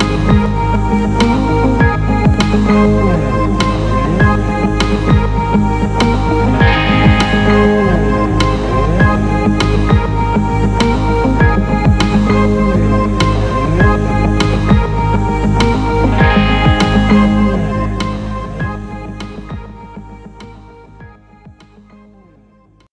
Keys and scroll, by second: 6.5 ctrl+alt+shift+e.